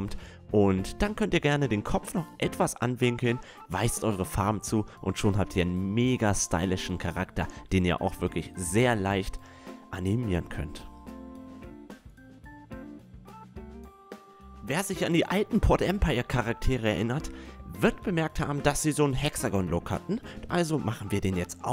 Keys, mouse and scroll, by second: 0.3 shift+d, 0.6-1.3 drag, 1.4 right drag, 2.1 drag, 2.2 a, 2.7 right click, 2.8 r, 3.5-4.4 drag, 3.8 a, 4.4 right click, 4.6 middle click, 4.9 click, 5.9 click, 6.7 right click, 7.1 click, 7.1 middle click, 7.1 right click, 9.1-10.2 drag, 9.8 a, 10.5-11.8 drag, 10.6 a, 13.1 middle click, 13.5-17.0 drag, 20.8 s.